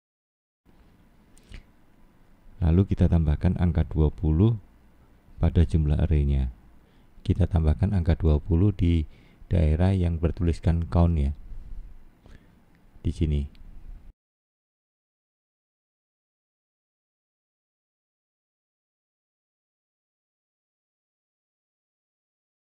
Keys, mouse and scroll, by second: 1.1 click, 1.8 click, 3.1 scroll down 2, 4.1 middle click, 5.8-6.5 scroll down 1, 6.6 middle click, 7.9-8.5 scroll down 5, 8.8 middle click, 11.2 middle click, 14.2 click, 18.3-18.9 scroll down 4, 19.3 middle click, 20.1 click, 20.6 middle click, 22.0-22.5 scroll up 6.